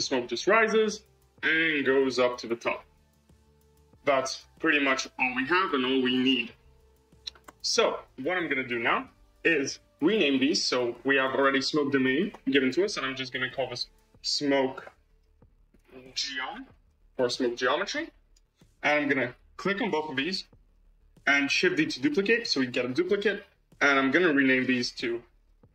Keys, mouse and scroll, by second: 4.3-6.6 scroll down 1, 7.4 space, 8.7-11.0 middle drag, 11.0 click, 11.2-13.7 drag, 19.2 click, 20.6 shift+click, 21.7 shift+d, 24.1 click, 24.2-25.7 drag.